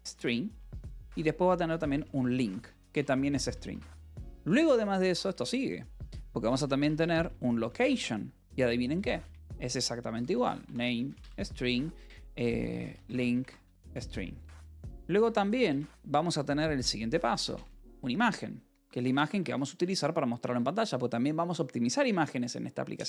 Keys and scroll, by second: 0.0-4.9 typing, 0.7 Return, 5.2 Return, 6.1-7.8 typing, 9.1 Return, 9.5-15.8 typing, 17.1-20.1 typing.